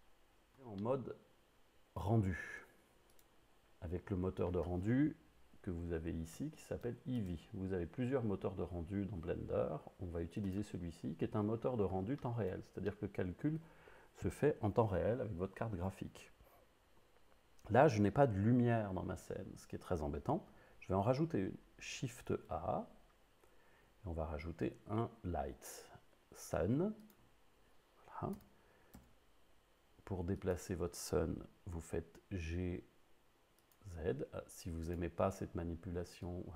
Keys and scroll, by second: 22.3 shift+a, 28.4 g, 29.7 z, 32.7 g.